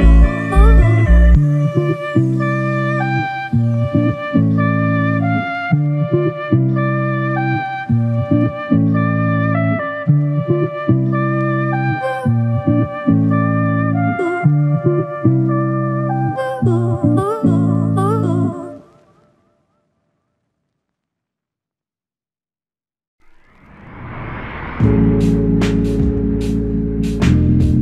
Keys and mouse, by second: 6.4 typing, 11.3 typing, 17.1 typing, 18.8 shift+click, 24.2 alt+click, 26.2 shift+click.